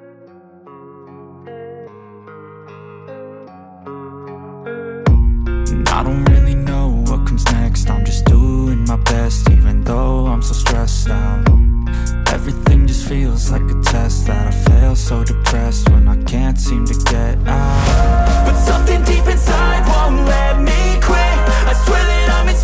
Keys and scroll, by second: 14.2-18.1 typing, 15.6 Return, 18.6 Return, 19.8 Return, 20.2 Down, 20.5 Up, 20.7 Down, 21.2 Down, 21.9 End, 22.2 Return.